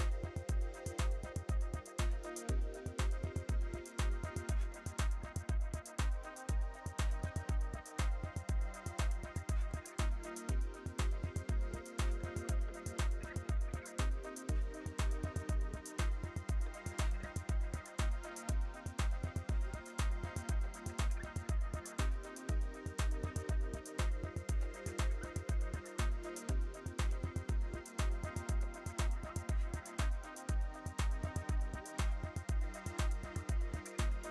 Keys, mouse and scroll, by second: 0.5-4.2 typing, 4.0 click, 4.4 right click, 4.5 click, 5.0 click, 5.3-7.0 shift+drag, 7.0 Return, 7.7 click, 9.4 scroll up 1, 9.6-10.0 scroll down 2, 10.0 click, 10.6-15.1 typing, 10.8 click, 16.1 click, 17.2 click, 20.1 click, 20.1-21.1 typing, 20.9 click, 21.5 click, 21.7 scroll down 1, 21.9 click, 22.1 right click, 22.5-26.2 drag, 26.2 Return, 26.4 z, 26.5 right click, 26.5 click, 27.1 right click, 27.3 click, 29.2 click, 29.4 alt+scroll up 1, 29.8 click, 29.9-31.6 typing, 32.5 click, 33.1 alt+scroll up 1, 33.4 click, 33.9 alt+scroll up 1, 34.2 click.